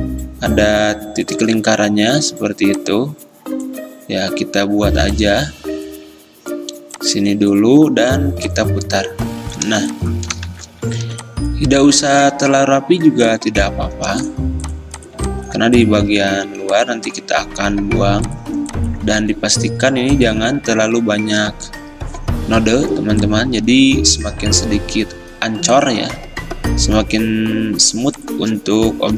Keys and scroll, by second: 1.5 ctrl+z, 10.6 x, 16.4 ctrl+z, 19.3 a.